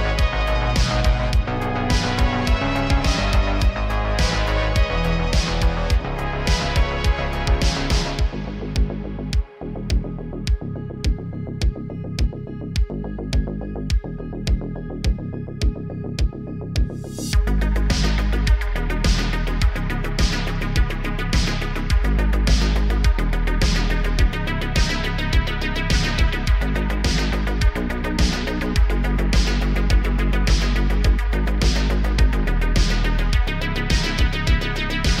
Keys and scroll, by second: 0.3 s, 0.5 x, 0.7 x, 5.5 shift+d, 7.3 g, 10.5 g, 14.5 shift+d, 15.9 r, 16.0 r, 20.1 x, 20.3 shift+a, 21.7 g, 21.9 z, 23.4 s, 24.3 s, 24.4 x, 24.7 y, 25.9 g, 26.4 r, 26.8 g, 28.0 g, 28.2 z, 31.0 z, 32.5 s, 32.8 z.